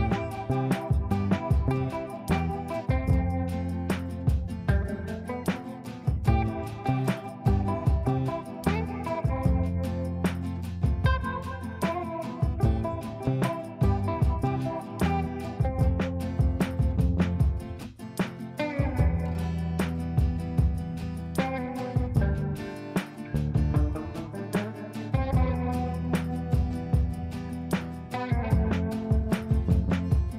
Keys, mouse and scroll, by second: 3.7 click, 4.3 ctrl+right click, 5.3 click, 6.5 ctrl+a, 8.4 shift+t, 11.4-14.0 typing, 15.1-19.9 typing, 21.4-23.9 typing, 24.9-25.2 typing, 26.5-29.4 typing, 29.9 ctrl+space.